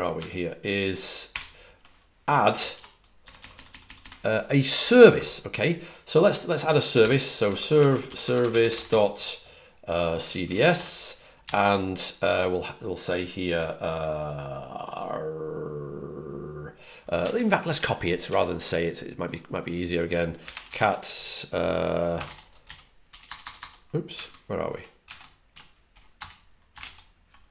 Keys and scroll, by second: 3.6-3.9 typing, 7.4-11.8 typing, 20.1-20.9 typing, 21.9-23.4 typing, 24.9 super+Tab, 26.6 Return.